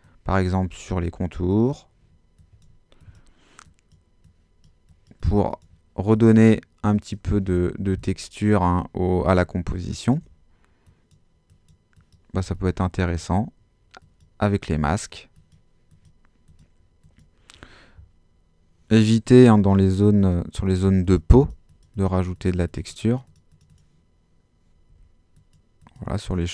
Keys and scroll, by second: 19.3 x, 24.9 x.